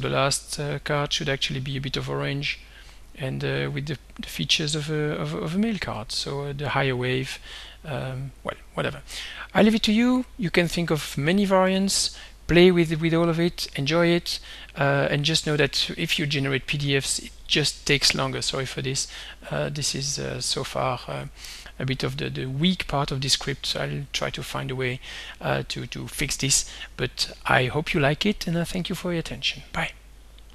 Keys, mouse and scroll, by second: 0.3 click, 3.0 click, 4.5-5.7 drag, 11.8 alt+Tab, 17.7 click, 19.0 click, 19.6 click, 20.4 click, 22.2 click, 23.5 click, 29.6 click.